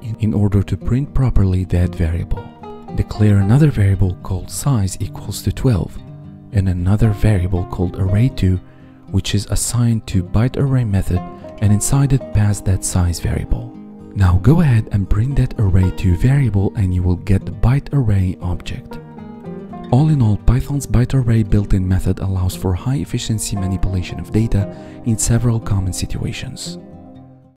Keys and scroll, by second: 16.2 Tab.